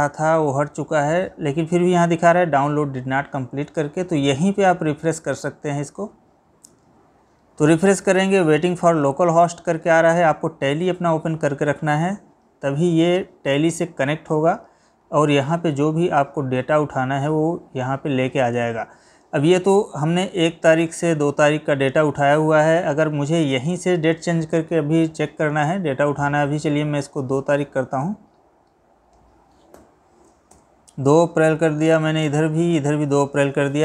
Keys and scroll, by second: 29.8 Delete.